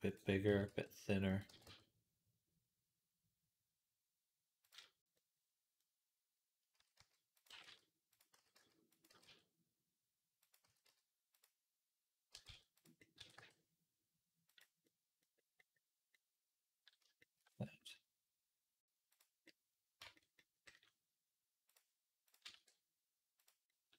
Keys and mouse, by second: 0.3 s, 1.3 g, 6.6 s, 7.3 g, 8.2 s, 8.9 g, 10.5 s, 12.1 g, 13.0 s, 14.7-16.0 middle drag, 16.0 click, 16.1-23.9 middle drag, 19.9 Tab, 21.6 click, 22.4 e.